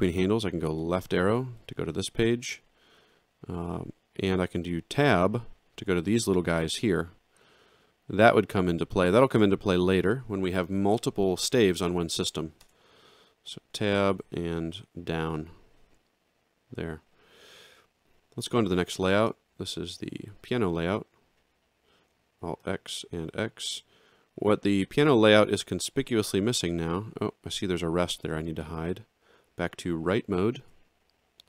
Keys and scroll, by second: 1.6 Down, 3.0 Right, 3.5 Down, 5.1 Tab, 5.9 Down, 12.6 Tab, 14.2 ctrl+alt+Down, 19.1 alt+shift+], 22.6 x, 30.5 ctrl+2.